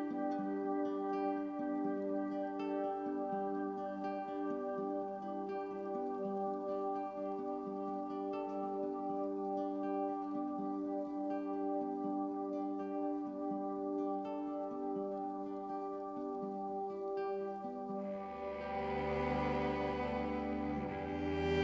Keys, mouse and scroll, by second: 1.0 F5, 10.0 Escape.